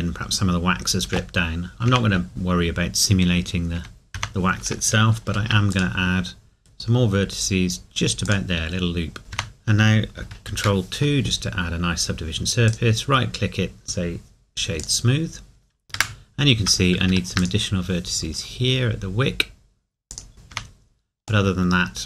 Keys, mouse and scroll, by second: 1.0 Tab, 5.3 ctrl+r, 5.7 click, 8.2 click, 9.3 Tab, 10.6 ctrl+2, 14.8 click, 17.0 ctrl+r, 17.5 click, 20.2 click, 20.5 Tab, 21.5 middle click.